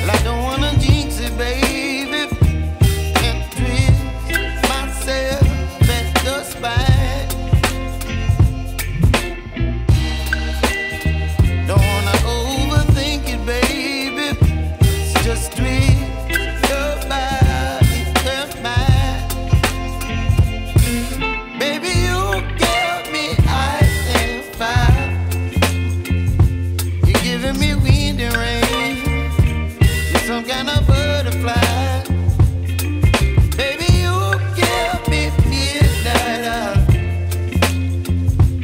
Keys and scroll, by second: 9.4 ctrl+Page_Down, 10.4 Escape, 11.8 c, 35.5 Escape, 37.5 Escape.